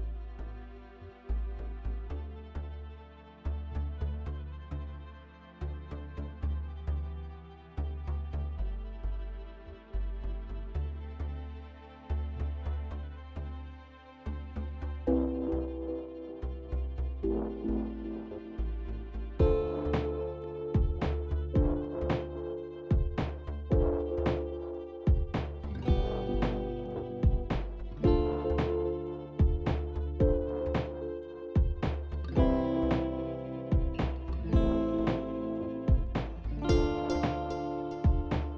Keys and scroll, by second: 8.7 ctrl+z, 9.1 ctrl+z, 9.9 ctrl+z, 20.0 KP_1.